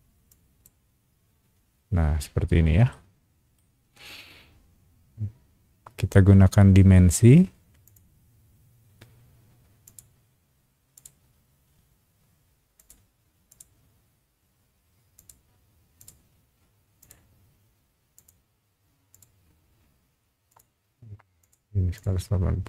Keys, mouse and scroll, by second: 0.3 click, 2.9 shift+middle click, 5.2 scroll down 1, 7.8 click, 9.8 click, 10.9 click, 12.7 click, 13.5 click, 15.1 click, 16.0 click, 17.0 click, 18.1 click, 19.1 click, 20.5 click, 21.4 click, 21.9 click.